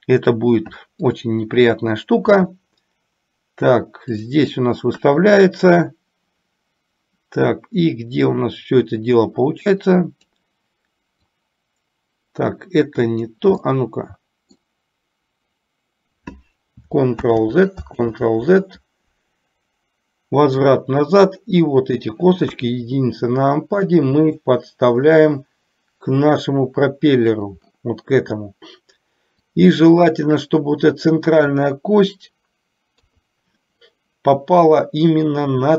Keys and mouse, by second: 1.0 click, 2.5 e, 5.0 KP_1, 9.8 click, 11.4-13.4 drag, 13.8 middle click, 17.3 ctrl+z, 20.8 click, 22.6 KP_1, 24.4-27.4 drag, 29.6 click, 29.9-31.0 drag, 33.0 KP_3.